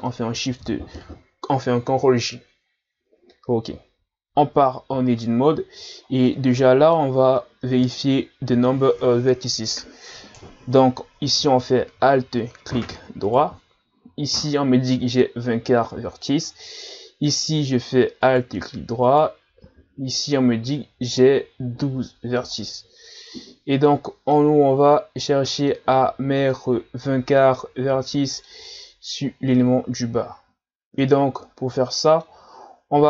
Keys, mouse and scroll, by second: 0.7 ctrl+j, 4.2 Tab, 5.3-6.3 scroll up 2, 6.3-7.3 middle drag, 7.3 scroll up 1, 13.3 alt+right click, 18.2 alt+right click, 19.1 alt+right click, 22.6-29.5 middle drag, 30.0-33.0 middle drag.